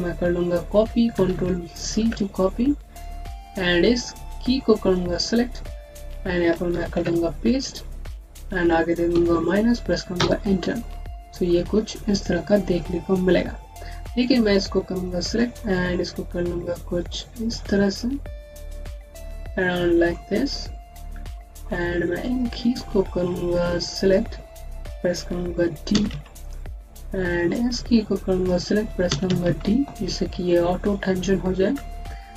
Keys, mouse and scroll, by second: 0.7 ctrl+c, 1.0 ctrl+c, 1.2 typing, 2.9 click, 6.8 ctrl+v, 7.9 click, 9.0 KP_Subtract, 10.0 KP_Enter, 11.0-11.6 scroll down 1, 11.6-12.2 scroll up 1, 13.9 click, 15.5 middle click, 20.3-21.1 scroll down 1, 21.2 alt+middle click, 21.6-22.2 scroll up 1, 22.2 click, 24.4-25.8 scroll down 1, 25.8 typing, 27.4 click, 28.9-29.3 typing.